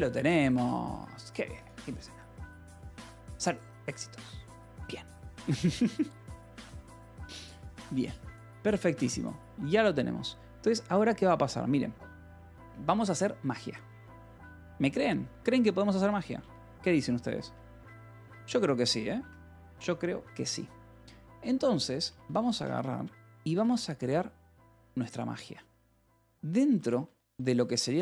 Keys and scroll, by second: 14.4 j, 15.1 k, 15.9 Escape, 16.8 alt+Tab, 18.0-19.1 typing, 19.8 ctrl+shift+r, 20.7 ctrl+r, 21.0 j, 21.7 k, 21.9 space, 23.3-24.6 typing, 25.1 ctrl+p, 25.6 Return, 26.5-28.0 typing.